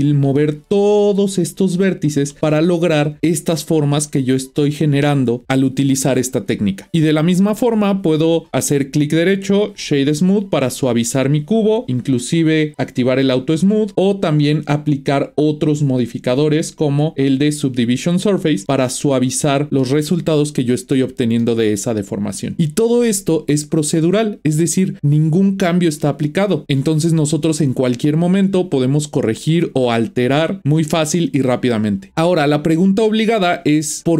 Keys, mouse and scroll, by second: 0.1 Tab, 0.3-2.3 middle drag, 2.3 Tab, 3.2-5.4 middle drag, 7.9 click, 8.8-11.8 right drag, 11.9 click, 13.2 click, 14.9 click, 15.8-18.6 drag, 18.6-21.0 middle drag, 21.4-24.2 middle drag.